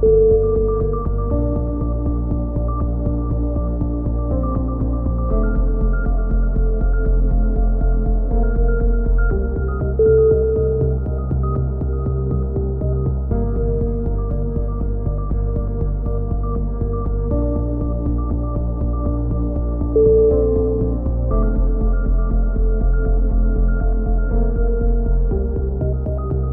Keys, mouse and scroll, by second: 0.6-2.0 right drag, 1.8 KP_3, 2.2 z, 2.4-4.1 drag, 7.0 middle click, 7.0 a, 7.2 z, 7.5 Tab, 7.5 middle click, 8.0 click, 10.7 KP_1, 10.9-12.3 middle drag, 12.6 Tab, 13.4 click, 14.8 z, 16.6 middle click, 17.4 KP_3, 17.5-19.4 middle drag, 20.6 z, 21.6-22.8 drag, 22.6 z, 24.3-25.5 drag, 25.2 alt+m, 25.8 a, 26.1 z.